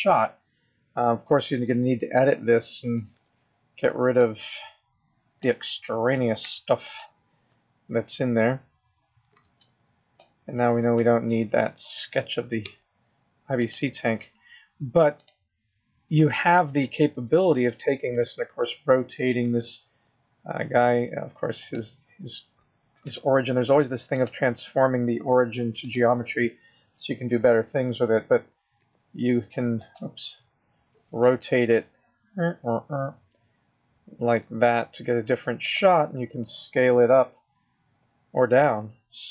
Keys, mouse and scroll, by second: 1.5 Tab, 3.1 b, 6.4 x, 9.3 b, 12.6 x, 15.1 click, 16.8 Tab, 18.1 r, 24.1 click, 27.4 r, 30.8 click, 30.9 r, 36.3 s.